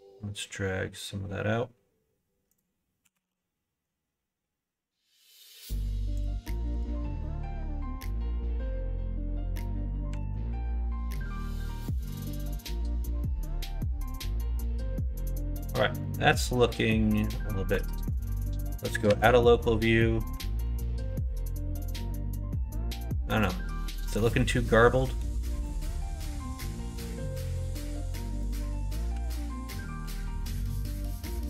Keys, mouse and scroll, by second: 3.0 s, 6.8 alt+h, 7.2-10.1 middle drag, 10.2 alt+h, 10.7 middle click, 11.6 ctrl+z, 12.1 ctrl+z, 12.6-13.9 middle drag, 14.1-15.7 middle drag, 16.0-17.3 middle drag, 17.9 alt+h, 19.0 /, 20.5 alt+z, 20.8-23.4 middle drag, 24.0-25.2 middle drag, 25.6 middle click, 28.4 middle click, 29.2 alt+z, 30.1 alt+z, 30.3 middle click, 30.9 middle click.